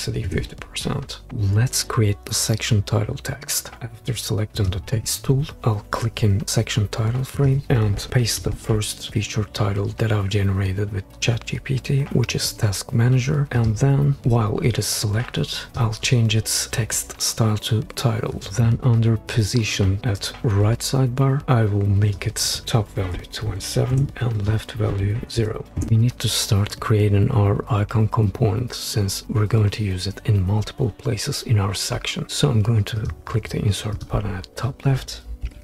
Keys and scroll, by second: 0.2 Return, 5.0 t, 8.4 super+v, 23.1 2, 23.4 7, 23.9 Return, 25.4 0, 25.8 Return.